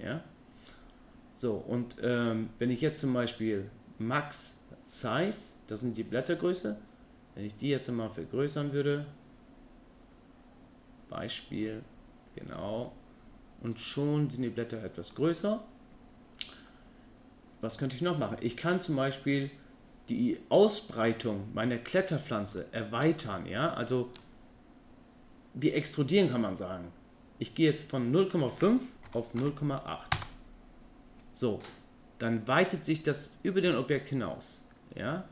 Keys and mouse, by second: 6.0-12.1 drag, 12.7-15.2 middle drag, 22.7 ctrl+middle click, 23.3 middle click, 24.0-24.3 shift+middle drag, 27.9-30.7 drag, 34.1-35.3 middle drag.